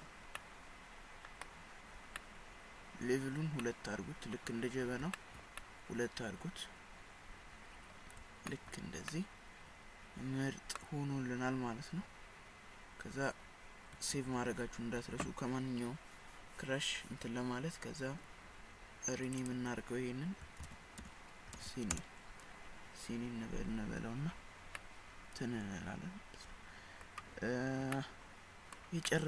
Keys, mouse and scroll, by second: 0.4 middle click, 1.9 scroll up 4, 2.2 middle click, 3.4 scroll down 1, 3.6 middle click, 5.2 shift+middle click, 5.6 middle click, 8.5 shift+scroll up 1, 8.5 shift+middle click, 9.1 middle click, 10.7 middle click, 14.2 ctrl+s, 19.3 click, 19.5 click, 24.8 middle click, 28.0 middle click, 28.5 middle click, 29.1 middle click.